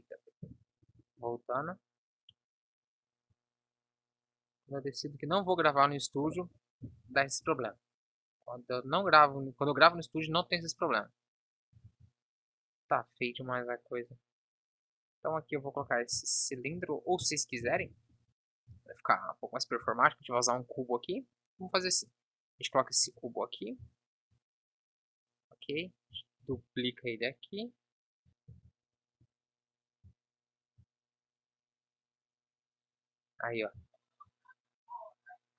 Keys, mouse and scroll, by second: 6.9 ctrl+j, 9.2 ctrl+s, 10.5 KP_1, 12.0 shift+a, 16.0 z, 17.7 Delete, 18.9 shift+a, 20.2 s, 22.2 s, 23.1 g, 26.5 shift+d, 32.9-35.5 drag.